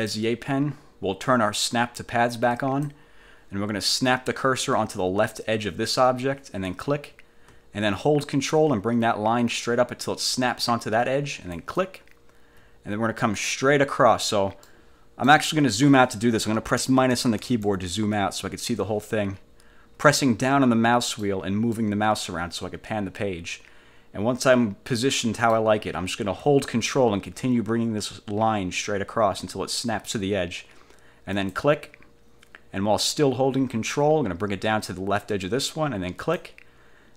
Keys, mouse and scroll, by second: 0.0 click, 2.6 click, 6.8 click, 11.7 ctrl+click, 14.8 click, 16.9 -, 20.3 click, 20.6-21.6 middle drag, 21.9-23.6 middle drag, 23.6-25.8 drag, 31.5 ctrl+click, 36.3 ctrl+click.